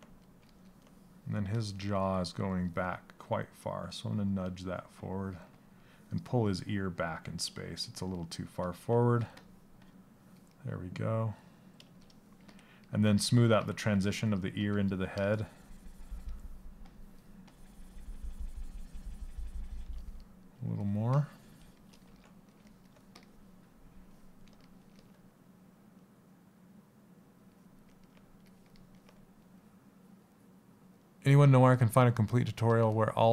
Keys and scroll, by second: 1.5 s.